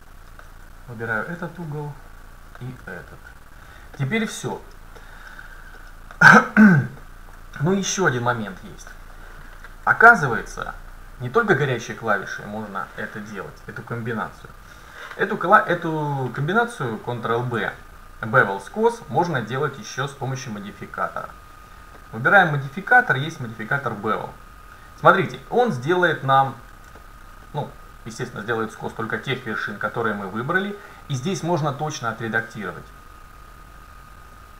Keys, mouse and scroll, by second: 1.1-2.8 right drag, 1.7-3.6 middle drag, 3.4-5.4 right drag, 4.0-9.8 middle drag, 20.2-23.8 drag, 26.3-29.3 middle drag, 33.4-34.5 drag.